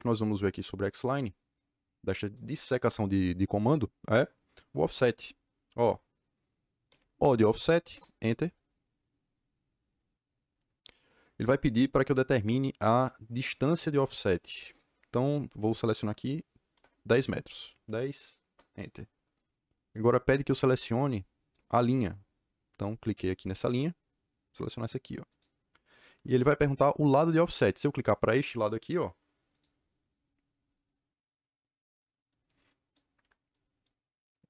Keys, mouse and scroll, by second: 6.8 o, 16.6 KP_1, 16.7 KP_0, 18.4 KP_Enter, 25.2 click, 29.5 click, 33.0 Escape, 33.2 Escape.